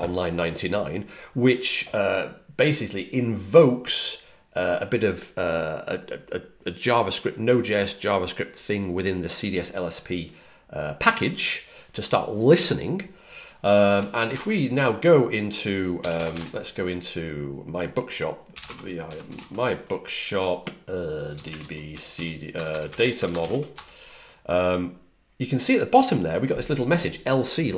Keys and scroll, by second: 14.2 typing, 15.7-16.7 typing, 18.2-19.7 typing, 21.0-23.9 typing.